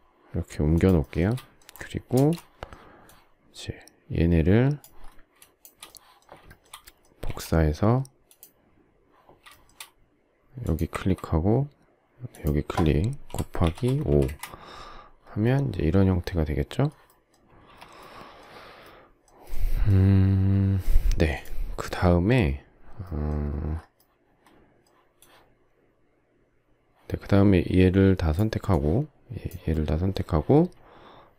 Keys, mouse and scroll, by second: 0.7 shift+click, 1.0 shift+middle click, 2.1 space, 5.3 shift+click, 6.5 shift+middle click, 7.2 q, 9.5 shift+middle click, 13.6-14.0 typing, 14.2 Return, 17.5 space.